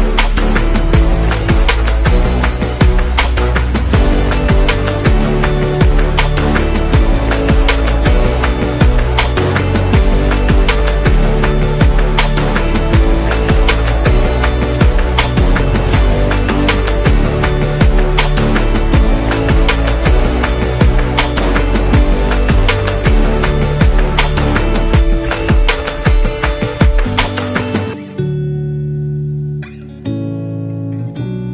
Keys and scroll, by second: 0.2-1.8 typing, 4.9 v, 6.1 z, 6.8 v, 7.7 p, 12.6 a, 19.8 BackSpace, 20.0 BackSpace, 21.2 Return, 22.3 a, 23.7 Caps_Lock, 26.7 v.